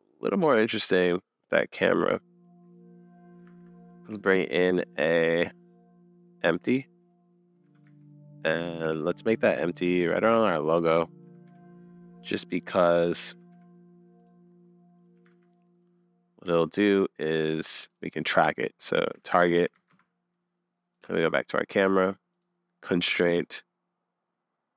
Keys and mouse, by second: 0.1 click, 2.1-3.4 middle drag, 3.5 shift+a, 7.1 middle click, 7.7 g, 10.3 `, 10.7 middle click, 10.7 `, 11.2 g, 12.5 click, 12.5 middle click, 12.7 middle click, 13.3 g, 14.4 middle click, 15.3 super+s, 15.5 middle click, 18.0-19.9 drag, 24.1-24.7 drag.